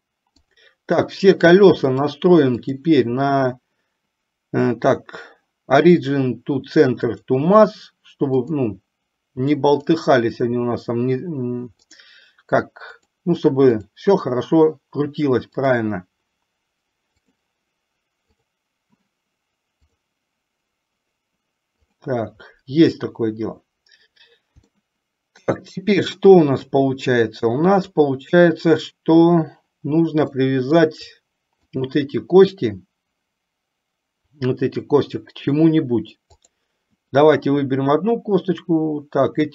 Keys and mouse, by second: 0.5 click, 2.1-7.5 drag, 8.6 click, 9.9-12.4 drag, 13.2 click, 13.9 click, 15.9-17.7 drag, 18.5 click, 20.0-22.3 drag, 25.0-25.8 shift+middle drag, 30.8-31.2 shift+middle drag, 31.9 click, 36.5 click.